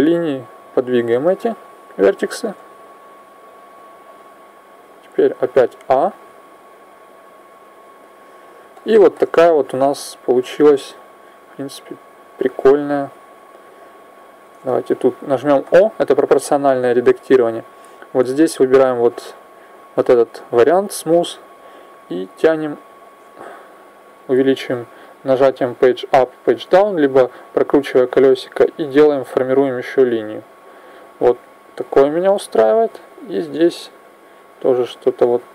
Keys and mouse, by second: 0.5 click, 1.2-2.4 right drag, 2.2 g, 3.5-5.3 drag, 5.3 a, 5.6 a, 6.6-8.0 drag, 10.8-12.6 drag, 13.5 right click, 15.4 o, 18.4 click, 21.6 click, 31.7 right click, 32.6 click.